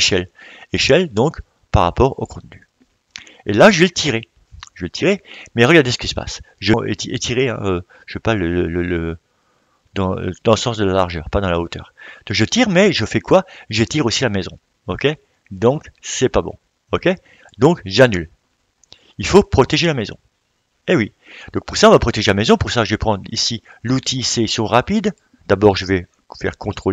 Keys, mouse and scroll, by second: 0.0-20.2 drag, 21.0-26.9 drag.